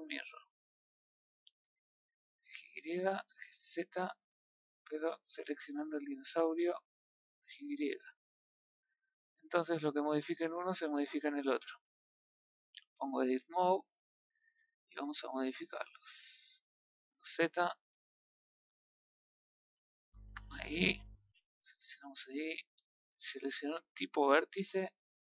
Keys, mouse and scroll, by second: 0.7-2.1 drag, 2.4 click, 2.9 click, 3.4-5.4 drag, 6.9 click, 7.4 click, 8.0-9.6 middle drag, 9.6-9.9 scroll down 2, 9.9-11.7 middle drag, 11.7 scroll up 1, 11.8 middle click, 12.1 scroll down 1, 12.3 scroll up 1, 12.4-13.4 middle drag, 13.4 Tab, 13.7 shift+middle click, 14.1 scroll up 2, 14.6-16.2 shift+middle drag, 16.2 scroll down 2, 16.6 middle click, 16.9 z, 17.8 middle click, 21.4-23.0 drag.